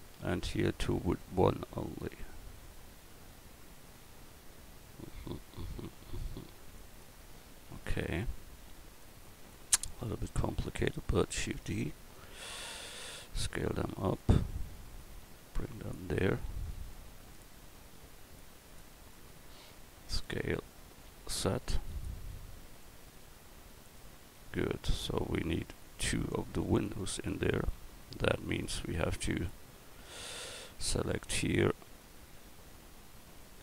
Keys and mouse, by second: 10.2 right click, 11.4 shift+d, 13.5 s, 15.0-16.9 drag, 17.1 middle click, 20.3 s, 26.5 Tab, 30.8 l, 32.3 a, 33.4 l.